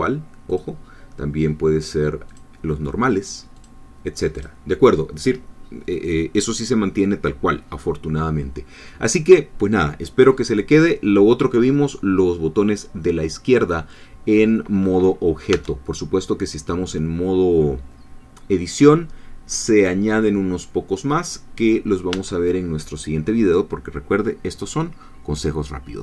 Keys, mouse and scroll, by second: 0.5 click, 2.3 click, 3.6 click, 4.4 click, 15.6 Tab, 22.2 Tab.